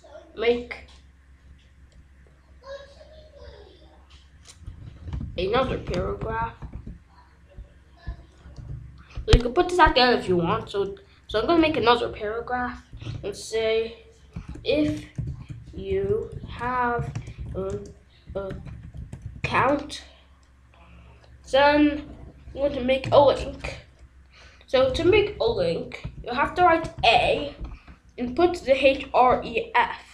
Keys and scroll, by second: 5.2 ctrl+z, 8.5 Return, 10.5 p, 11.3 Return, 14.3-19.9 typing, 23.0 a, 25.2 Down, 25.4 Return, 26.4 Right, 26.9 ctrl+s.